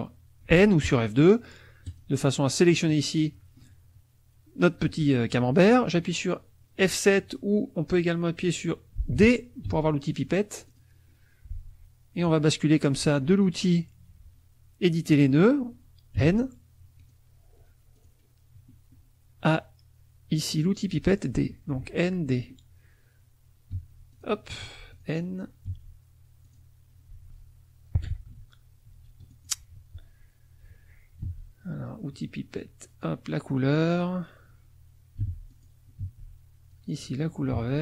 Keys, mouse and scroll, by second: 1.8 click, 2.7 click, 3.2-4.4 drag, 9.6 d, 10.6 click, 16.2 n, 17.0 click, 17.9 click, 23.7 d, 24.1 click, 24.6 n, 24.9 click, 25.7 d, 26.4 click, 27.1 n, 28.4 ctrl+z, 29.3 ctrl+click, 31.2 d, 32.6 click, 35.2 n, 35.5 click, 36.0 d, 36.7 click, 37.5 d.